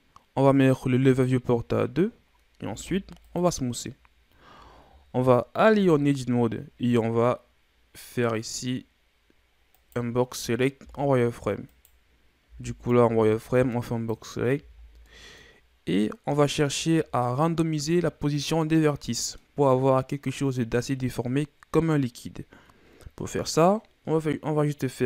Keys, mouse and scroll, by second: 1.1-2.7 drag, 2.7 w, 5.1 KP_1, 5.7 Tab, 9.7 right click, 10.8 z, 11.7 right click, 12.4 b, 14.5 z, 14.7-15.0 scroll down 3, 15.0 middle click, 15.5-16.8 scroll up 1, 16.8-17.9 shift+scroll up 3, 17.9-21.0 middle drag.